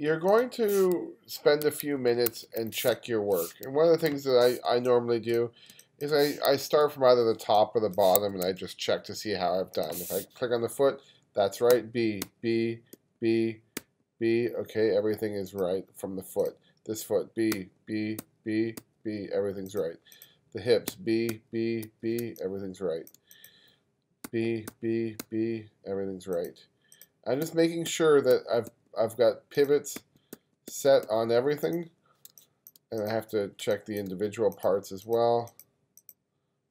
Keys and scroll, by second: 1.7 1, 2.3 2, 2.9 space, 4.7 space, 5.7 space, 7.5 space, 8.5 2, 11.7 b, 13.0 b, 13.8 b, 17.5 b, 18.2 b, 18.8 b, 20.9 b, 22.2 space, 24.3 b, 27.5 b, 30.0 b, 32.3 space, 33.6 space.